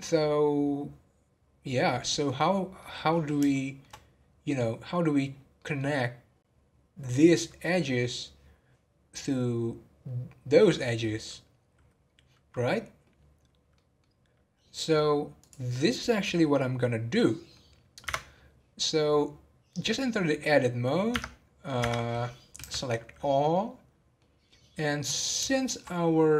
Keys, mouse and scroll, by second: 2.4-2.8 scroll down 1, 2.8-4.0 middle drag, 4.0 scroll up 1, 4.4-8.6 middle drag, 13.7 middle click, 14.1-15.4 scroll down 1, 15.4 click, 17.1 middle click, 18.0 Tab, 21.7 Tab, 22.6 a, 23.5 middle click, 24.4-25.5 scroll up 1, 25.5-26.3 shift+middle drag.